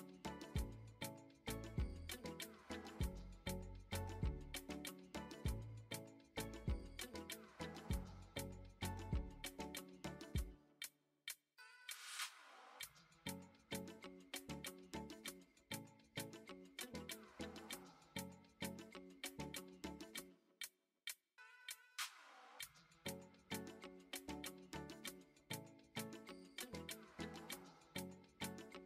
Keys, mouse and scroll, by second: 0.4 shift+a, 4.8-8.0 drag, 9.5 s, 11.3 shift+middle click, 11.8 Tab, 12.4 Tab, 12.7 shift+a, 14.3 ctrl+a, 16.0 click, 16.7 ctrl+a, 18.6-19.7 right drag, 20.9 drag, 22.0 click, 22.8 click, 24.2 right click, 26.2 click, 27.0 shift+middle click, 27.5 middle drag, 28.7 click.